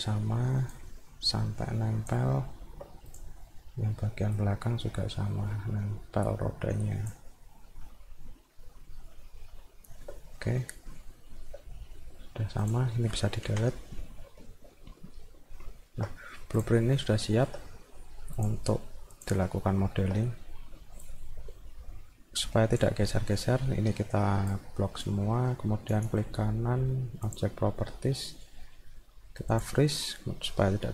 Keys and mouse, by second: 0.7-2.1 drag, 2.4 alt+middle click, 3.1 click, 3.4 middle click, 4.3-7.1 drag, 7.3 middle click, 7.8-10.0 alt+middle drag, 10.3 middle click, 11.1 alt+middle click, 12.6 click, 14.4-16.0 alt+middle drag, 16.6 click, 16.9 middle click, 17.3 alt+middle click, 18.4 click, 19.1 click, 19.7 alt+middle click, 21.1-22.8 drag, 24.5 click, 25.9 right click, 27.3 click, 29.5 click.